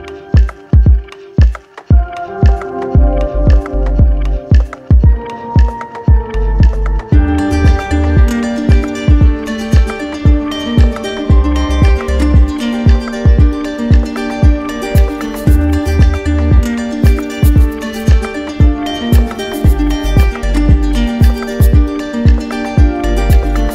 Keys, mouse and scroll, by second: 0.0 click, 1.5 click, 3.1 alt+click, 5.2 click, 7.2 click, 8.2 click, 10.0 click, 10.8 click, 12.3 alt+click, 13.1 alt+click, 13.9 click, 15.2 click, 16.1 alt+click, 18.3 alt+click, 19.4 d, 19.6 alt+click, 19.6 d, 19.9 d, 22.4-23.4 shift+drag.